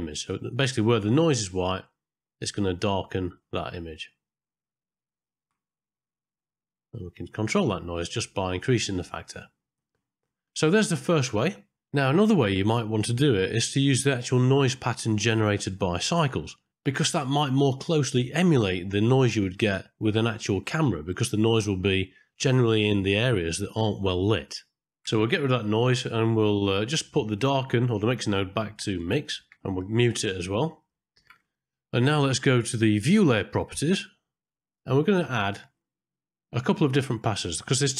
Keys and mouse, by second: 0.8 ctrl+shift+click, 5.2 ctrl+shift+click, 6.4-10.0 drag, 10.2 middle click, 12.4 middle click, 21.1 middle click, 22.3 click, 24.1 ctrl+right click, 24.9 click, 26.0 middle click, 27.9 click, 30.1 click, 30.7 m, 30.9 middle click, 31.8 ctrl+space, 35.8 middle click.